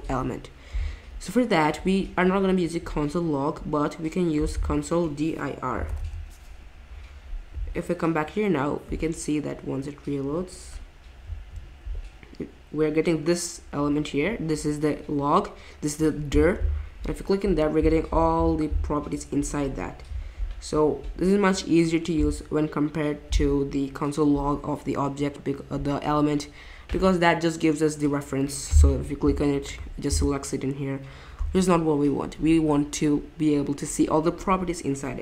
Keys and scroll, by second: 5.6-6.5 typing, 8.1 typing.